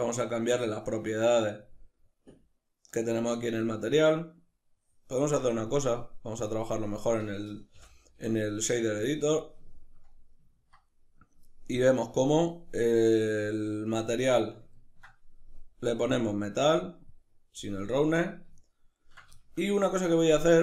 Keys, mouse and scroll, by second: 7.7 n, 9.7-11.9 ctrl+middle drag, 11.9-14.4 drag, 14.4-16.1 middle drag, 16.1-18.6 drag, 18.6-20.6 ctrl+middle drag.